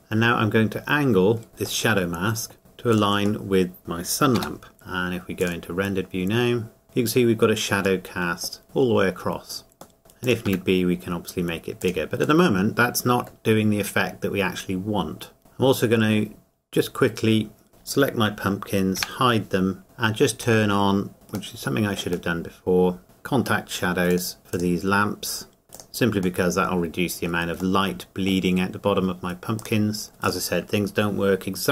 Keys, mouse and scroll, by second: 0.0 middle click, 0.0 middle click, 1.5 click, 1.9 middle click, 2.6 g, 2.9 click, 3.5 middle click, 4.3 g, 4.7-5.1 scroll up 1, 5.4 click, 6.8 scroll down 1, 8.0 middle click, 8.6 middle click, 10.0 g, 10.2 click, 10.5 s, 11.8 click, 12.4 middle click, 13.6-15.4 scroll up 1, 15.4 click, 17.7 shift+click, 20.0 shift+middle click, 20.0 scroll up 1, 21.1-22.3 scroll up 1, 22.3 middle click, 23.0 click, 26.4 middle click, 26.6 middle click, 29.6 click.